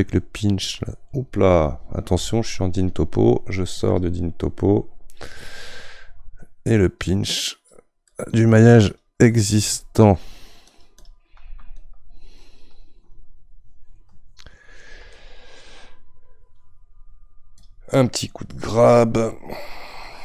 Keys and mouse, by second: 2.7 ctrl+z, 7.1-14.8 drag, 15.1-17.6 middle drag, 17.6-20.2 drag.